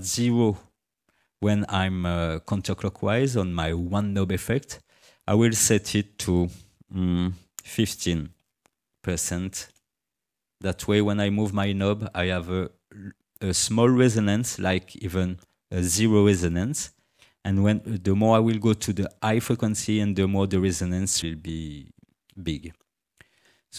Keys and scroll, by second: 7.9 1, 8.4 5, 9.7 Return.